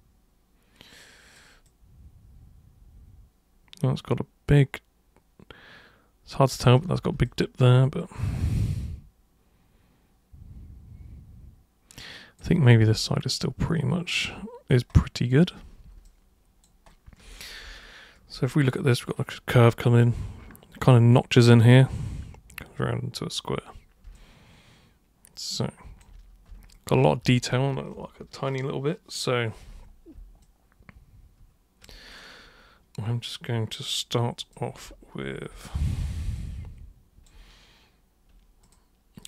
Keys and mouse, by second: 1.7-6.7 alt+super+drag, 7.3-12.4 alt+super+drag, 13.1-14.7 alt+super+drag, 16.1-16.7 alt+super+drag, 24.1-26.0 alt+super+drag, 30.4-31.9 alt+super+drag, 32.2 super+click, 34.4 super+click, 36.4 alt+super+click, 38.7 super+click.